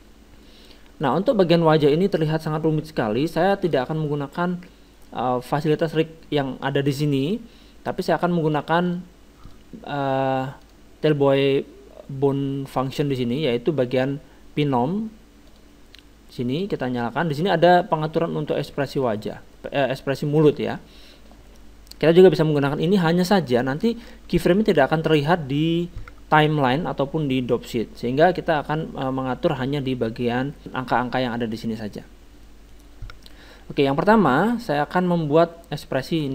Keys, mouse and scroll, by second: 3.3-5.8 middle drag, 8.0-12.4 drag, 12.8-14.5 drag, 15.5-19.0 drag, 19.0-36.0 middle drag, 36.0-36.3 drag.